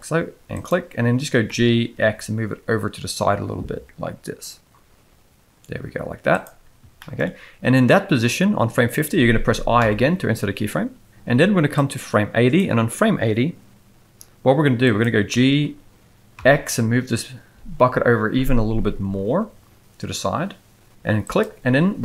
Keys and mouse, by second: 1.5 g, 7.0 shift+middle click, 9.8 i, 11.7-12.5 drag, 14.9 click, 15.3 g.